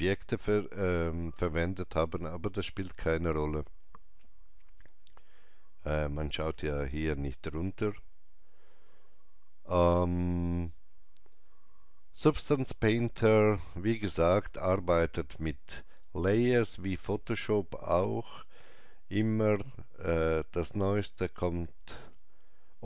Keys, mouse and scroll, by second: 5.0 alt+middle click, 6.5-12.7 alt+drag.